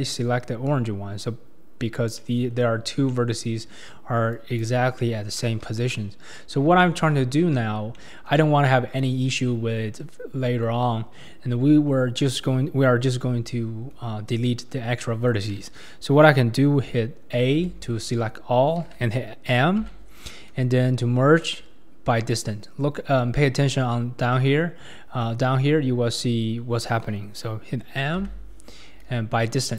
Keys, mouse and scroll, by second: 4.3 click, 5.0 middle click, 5.6 KP_1, 6.0-6.8 scroll down 9, 6.8 shift+middle click, 7.4-8.0 scroll up 1, 8.0-9.2 shift+middle drag, 9.2-9.7 scroll down 1, 9.7-10.4 scroll down 1, 17.6 a, 19.9 m, 24.7 click, 24.7 middle click, 24.7 right click, 28.2 m.